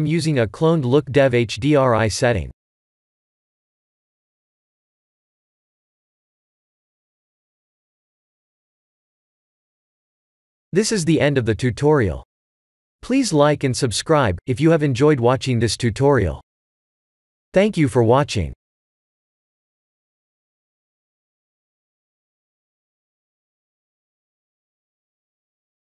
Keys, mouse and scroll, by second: 4.9 click, 6.0 click, 6.7 ctrl+s, 6.9 click.